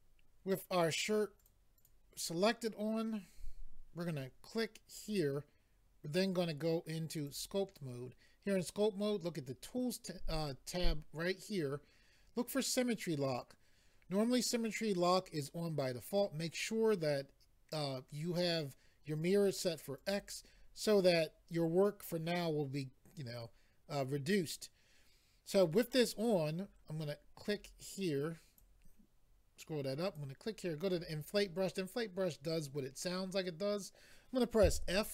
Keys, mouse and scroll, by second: 1.4 click, 1.8 click, 5.0 click, 7.1 click, 20.0 click, 20.1 click, 27.5 click, 30.2 click, 30.8 click, 30.9 click.